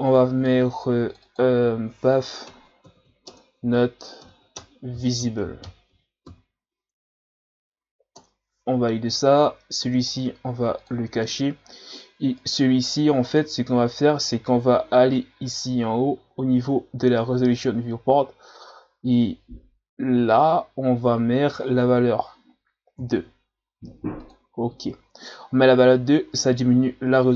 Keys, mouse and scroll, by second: 10.1 click, 10.8 click, 12.4 right click, 13.3-14.1 scroll down 1, 15.0-16.9 scroll up 8, 20.3-23.3 drag, 26.3 ctrl+scroll up 2.